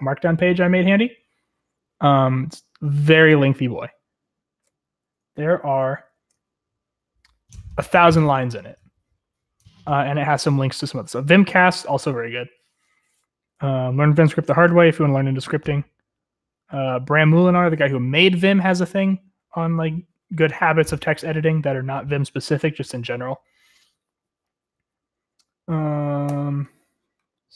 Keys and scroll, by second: 5.4 shift+g, 6.1 ctrl+g.